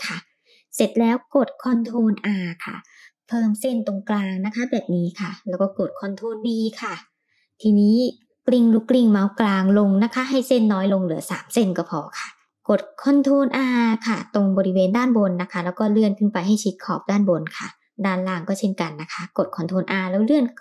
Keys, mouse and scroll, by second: 1.3 ctrl+r, 5.1 ctrl+b, 11.9 middle click, 14.6 ctrl+r, 17.2 shift+middle click, 18.3 ctrl+r.